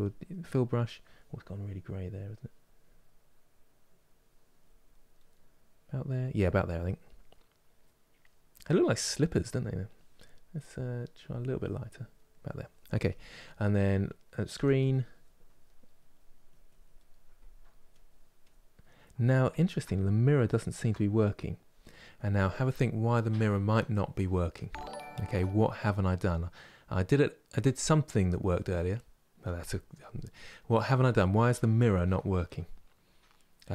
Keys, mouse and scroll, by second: 0.2-2.0 middle drag, 2.0-4.7 drag, 4.9-10.8 middle drag, 10.8-13.7 drag, 13.7 middle click, 14.2 f, 15.3 middle click, 15.8 click, 16.8 middle click, 17.6 click, 18.5-33.7 middle drag.